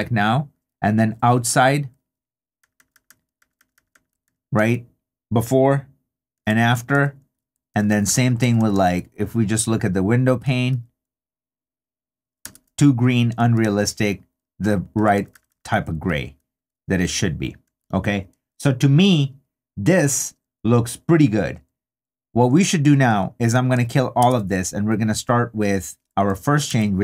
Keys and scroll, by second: 1.5 3, 3.4 2, 4.2 super+2, 4.5 super+d, 6.3 super+d, 6.7 super+3, 7.7 2, 10.7 super+d, 12.4 super+d, 13.4 super+3, 14.9 2, 17.6 3, 24.2 super+d, 26.7 super+d.